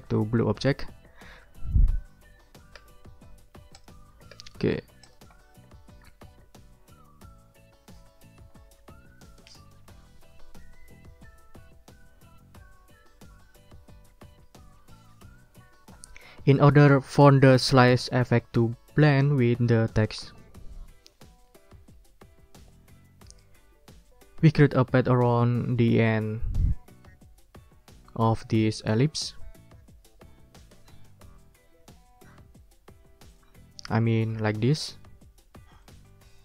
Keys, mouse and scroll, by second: 2.8 d, 3.8 click, 4.3 d, 4.7 ctrl+scroll down 2, 5.0-6.4 ctrl+drag, 20.5 ctrl+click, 21.1 ctrl+scroll up 1, 21.4 ctrl+click, 33.3 click, 34.0-34.5 ctrl+scroll up 2, 35.8 right click.